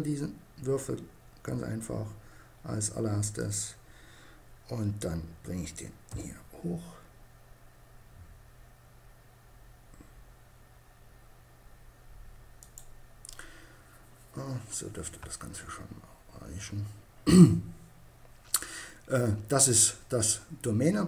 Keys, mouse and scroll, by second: 2.7-4.4 drag, 5.2 g, 11.9-13.5 drag.